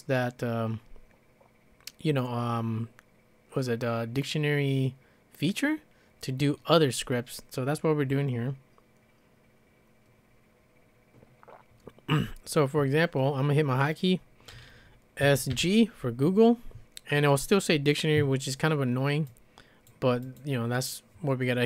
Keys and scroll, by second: 15.2-15.5 typing.